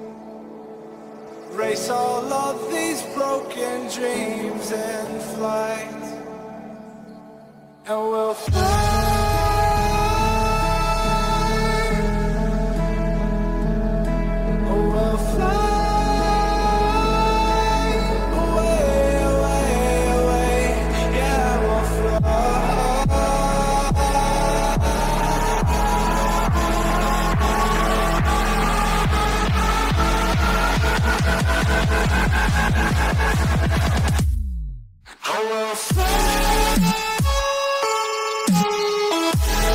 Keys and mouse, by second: 2.6 KP_3, 4.2 ctrl+KP_3, 5.8 c, 8.9 g, 11.2 a, 11.4 a, 12.6 c, 14.5 KP_3, 15.9 c, 18.7 g, 21.7 a, 21.9 a, 22.8 c, 24.7 KP_3, 25.9 ctrl+KP_3, 27.5 c, 30.6 g, 32.9 a, 33.0 a, 34.0 c, 35.9 KP_3, 37.3 c.